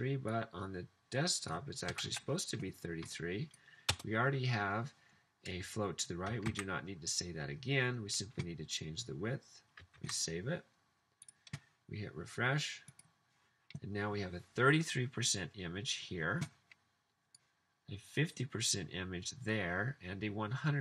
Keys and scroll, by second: 2.1 typing, 4.0 BackSpace, 6.5 super+s, 10.0 super+s.